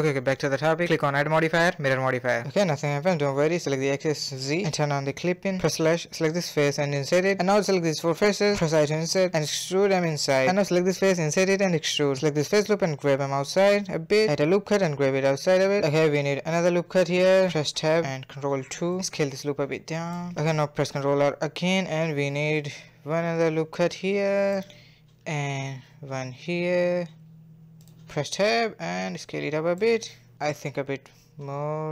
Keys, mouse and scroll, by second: 0.5-0.9 drag, 1.9-3.5 middle drag, 3.5 click, 3.9 click, 4.8 click, 5.3 /, 5.8 3, 5.9 click, 7.1 click, 7.5 shift+click, 8.2 middle click, 8.8 KP_Decimal, 9.5 e, 10.1 click, 10.8 e, 11.6 3, 12.0 alt+click, 12.3 g, 13.9 ctrl+r, 14.9 Tab, 14.9 scroll down 2, 15.0-15.7 middle drag, 15.7 Tab, 16.1 ctrl+r, 17.6 Tab, 18.2 ctrl+3, 18.5 Tab, 18.9-20.1 middle drag, 20.1 s, 20.4-20.8 scroll up 3, 20.8 middle click, 21.3 scroll up 2, 21.4 middle click, 21.6 ctrl+r, 25.1 scroll down 2, 25.2 middle click, 25.4 ctrl+r, 26.7 middle click, 27.4 Tab, 27.6 middle click, 28.4 s, 29.3 a, 29.5 scroll down 1, 29.6-31.3 middle drag, 31.3 click, 31.6 s.